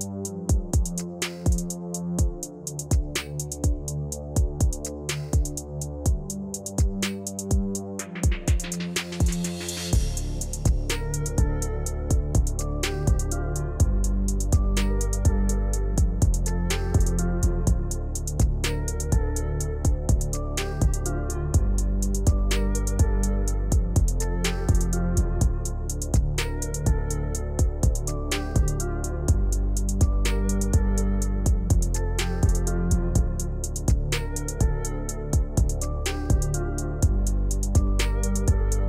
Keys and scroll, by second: 30.1 u.